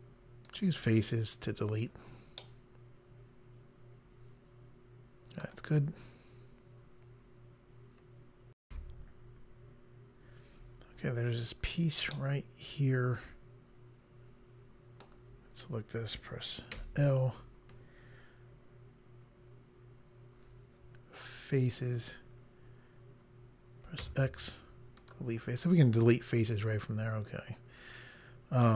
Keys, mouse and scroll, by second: 0.5 click, 2.5 middle click, 8.6 Pause, 12.1 middle click, 16.7 l, 21.6 click, 24.0 x, 25.0 click.